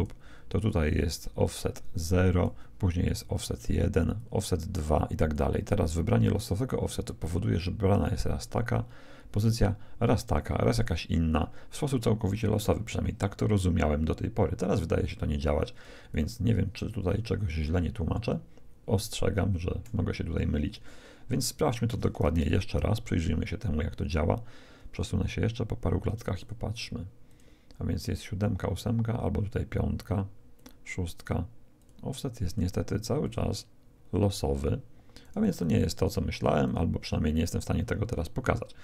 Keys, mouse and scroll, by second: 1.6-5.9 drag, 15.8 d, 16.1-18.0 right drag, 16.1 d, 19.8 d, 22.2 shift+z, 23.1-24.8 middle drag, 26.3-28.9 drag, 30.5-34.9 drag, 35.2-38.3 drag.